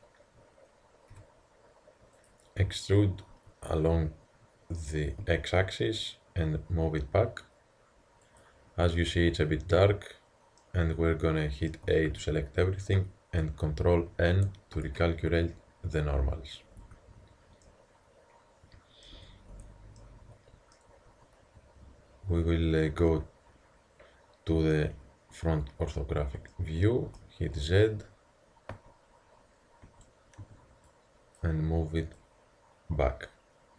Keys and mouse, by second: 1.1 s, 3.3 e, 10.6-11.7 middle drag, 11.9 a, 12.1 a, 14.1 ctrl+n, 16.8 a, 17.7-18.4 middle drag, 19.2 Tab, 19.6 Tab, 22.7 middle click, 23.1 z, 24.8 KP_1, 28.8 a, 29.9 a, 30.4 b, 32.2-33.7 drag.